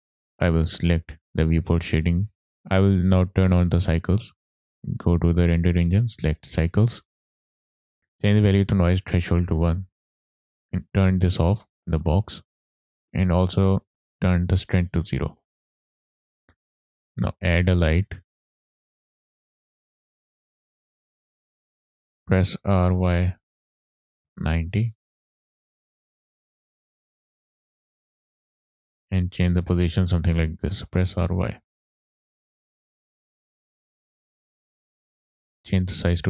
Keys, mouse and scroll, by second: 0.0 click, 2.8 click, 4.8 click, 5.6-7.5 drag, 11.2 click, 11.6 click, 12.7 click, 14.1 click, 15.4-16.2 scroll down 6, 16.4-17.0 middle drag, 17.1 click, 17.5 shift+a, 23.4 y, 24.2 KP_9, 24.8 KP_0, 25.3 KP_Enter, 25.7 click, 26.5 click, 27.1 click, 27.5 scroll up 2, 27.7 shift+middle click, 28.2 click, 29.3 shift+middle click, 29.6 scroll down 2, 30.8 r, 31.6 y, 32.7 click, 32.9 click, 34.9 click, 35.6-36.2 drag.